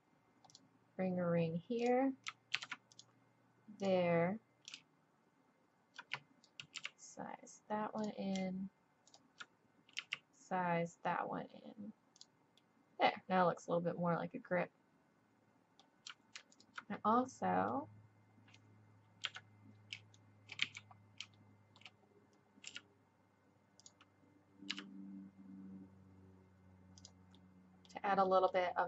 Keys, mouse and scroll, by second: 2.5 ctrl+r, 6.8 s, 9.1-12.3 drag, 12.3 s, 12.8 middle click, 13.1 click, 13.4 click, 14.7 middle click, 14.9 middle click, 15.1 middle click, 15.2 middle click, 15.5 middle click, 16.5 click, 17.4 middle click, 17.8 click, 18.5 middle click, 19.2 KP_3, 20.6 z, 22.7 s, 24.7 g, 27.3 middle click.